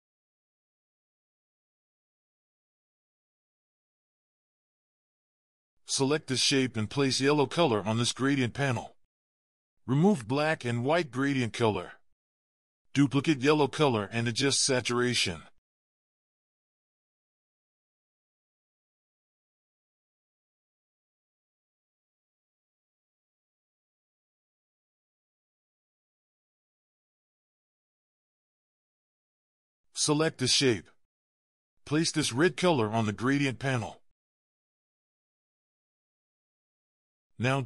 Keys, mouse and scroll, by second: 0.9 double click, 4.2-5.0 scroll down 1, 14.9 alt+click, 17.1 double click.